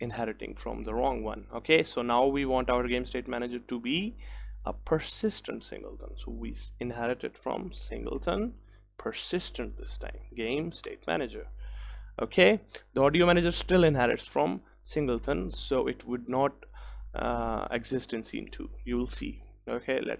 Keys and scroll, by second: 10.9 Return, 10.9 Return, 12.4 ctrl+s.